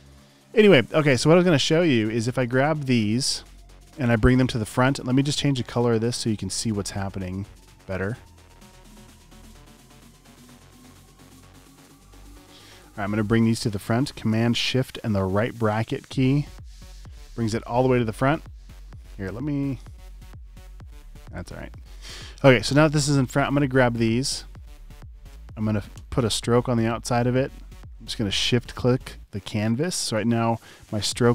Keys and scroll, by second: 7.0 x, 11.1 v, 13.8 typing, 16.8 shift+super+}, 26.0 i.